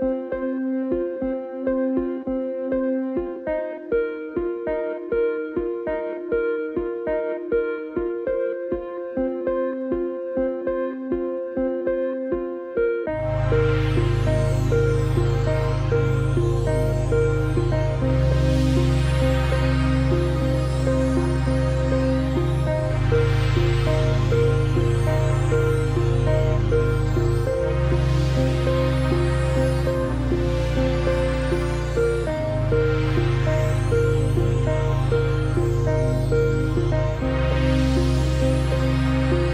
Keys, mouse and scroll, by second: 0.1 click, 0.3 space, 0.6 click, 1.7 click, 1.9 alt+scroll up 2, 2.2 click, 3.4 space, 3.6 click, 7.9 click, 8.5-9.0 typing, 9.9 click, 15.7 click, 16.9 click, 17.6-18.3 alt+scroll up 2, 19.8 click, 20.2 alt+scroll up 2, 20.7 click, 22.1 ctrl+z, 22.8 click, 23.7 ctrl+z, 24.4 click, 27.5 z, 28.0 click, 31.0 z, 31.8-32.1 alt+scroll down 2, 33.3 click, 34.0-34.3 alt+scroll down 2, 34.3 space, 34.9 alt+scroll up 2, 35.6 click.